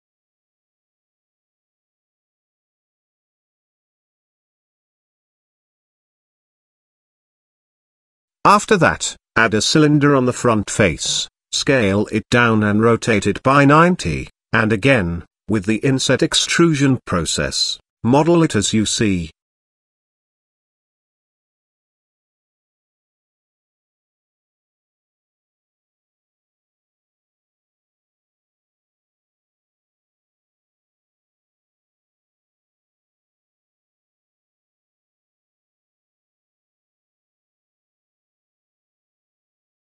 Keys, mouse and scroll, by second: 1.6 click, 3.1 s, 5.3 middle click, 6.5 middle drag, 7.7 click, 9.0 click, 9.4 shift+a, 11.4 s, 13.3 r, 15.0 middle click, 15.4 scroll down 1, 15.8 middle click, 16.2 s, 18.1 middle click, 19.1 Tab, 20.0 click, 20.8 middle click, 21.3 click, 22.4 i, 23.8 e, 25.2 e, 26.3 s, 28.4 e, 29.9 i, 31.3 e, 32.8-33.2 middle drag, 34.0-35.6 middle drag, 36.7-38.1 middle drag, 38.7 g.